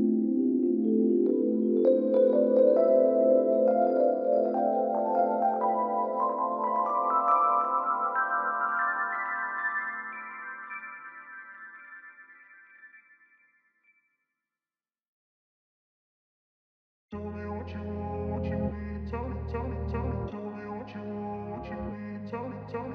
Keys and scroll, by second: 9.7 ctrl+a.